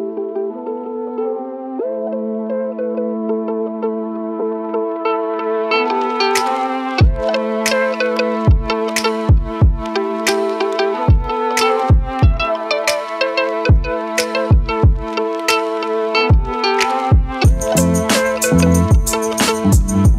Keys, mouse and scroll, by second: 2.2 shift+c, 3.2-5.7 typing, 6.9 t, 8.3 ctrl+click, 11.9 click, 17.6 click, 18.3 right click.